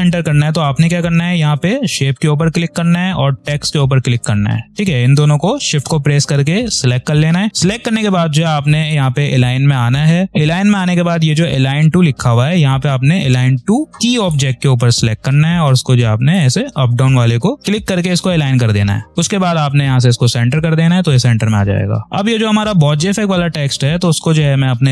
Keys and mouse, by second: 1.0 click, 3.3 shift+click, 11.5 click, 14.1 click, 19.9-24.9 drag.